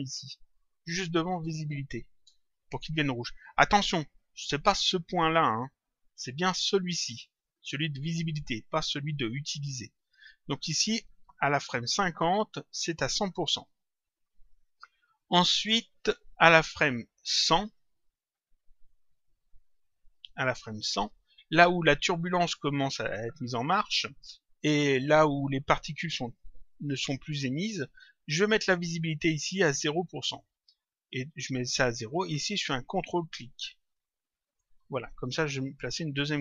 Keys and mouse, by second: 1.3 ctrl+click, 17.9 click, 20.0 click, 29.3 click, 33.8 click.